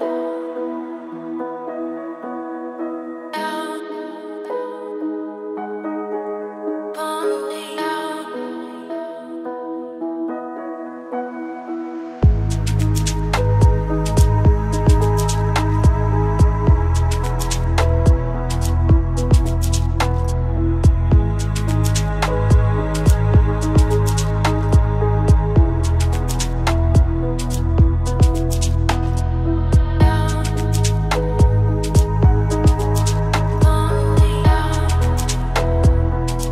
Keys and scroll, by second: 11.3 ctrl+space.